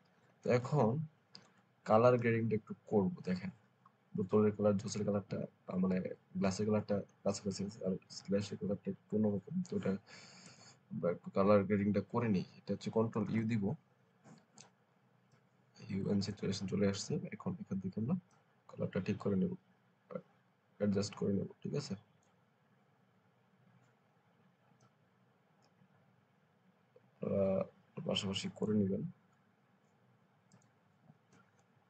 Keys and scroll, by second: 13.1 ctrl+u.